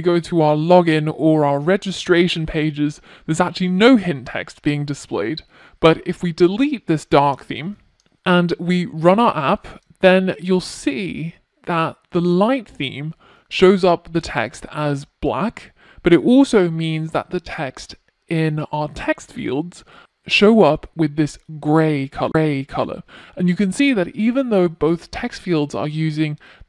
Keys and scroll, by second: 6.6 ctrl+r, 8.2 ctrl+r.